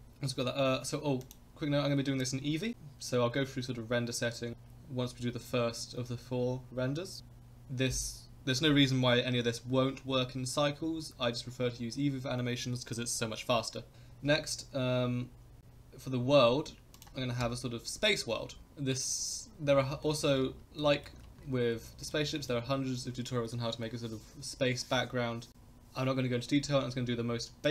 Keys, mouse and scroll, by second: 1.2 click, 15.6-18.6 drag, 18.6 KP_0, 19.6-20.0 scroll up 3, 20.0 middle drag, 20.8-21.1 shift+middle drag, 21.7-22.1 middle drag, 22.4 shift+middle click.